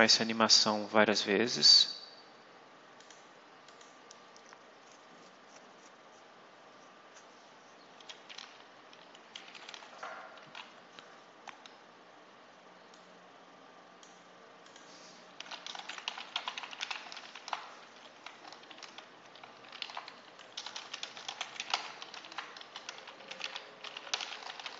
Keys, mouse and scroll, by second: 2.9 click, 3.5 click, 12.8-14.1 drag, 14.5 click, 15.0-17.7 typing, 17.7 shift+Left, 19.3-24.7 typing.